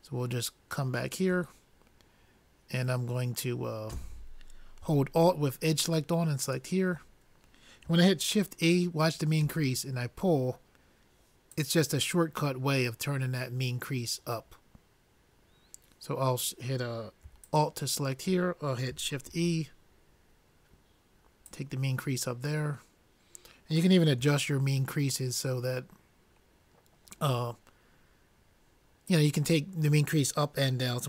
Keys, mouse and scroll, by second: 6.9-9.4 drag, 9.4 shift+e, 18.0-19.6 drag, 19.6 shift+e, 25.7-27.2 middle drag, 29.9-31.0 drag.